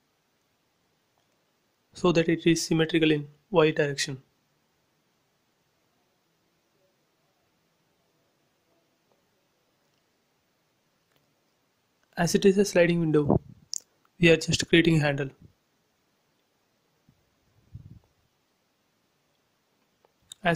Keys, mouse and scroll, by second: 0.3 Left, 1.5 space, 1.8-2.2 scroll down 2, 3.0 click, 3.5-5.3 middle drag, 5.3 scroll up 1, 6.1 scroll down 1, 6.8 shift+middle click, 6.9 shift+middle click, 7.9-8.7 scroll up 1, 8.8 shift+middle click, 9.8 scroll up 1, 10.7 t, 11.5 click, 11.8 scroll down 1, 13.2 Up, 14.3 click, 14.4 space, 15.2-15.6 scroll up 1, 17.2 scroll up 1, 18.0 click, 19.1 1, 19.5 shift+', 19.7 Return, 20.2 space, 20.5 shift+middle click.